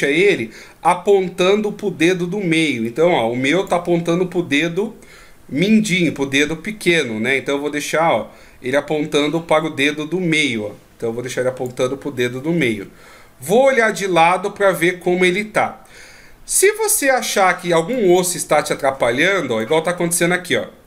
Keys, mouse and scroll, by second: 2.9 click, 7.9 click, 13.5 KP_3, 15.0-15.6 scroll down 3, 15.5-16.7 scroll up 5, 17.3 d, 17.4 click, 17.9 d, 18.2 right click, 19.6 d, 20.3 middle click, 20.3 d.